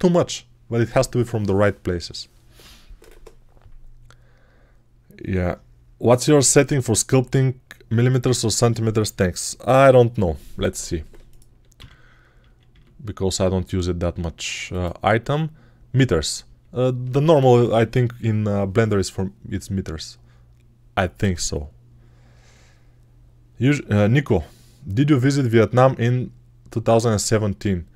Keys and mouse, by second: 11.6 n, 12.2 n, 12.6 n, 15.6-27.9 middle drag, 16.3 n.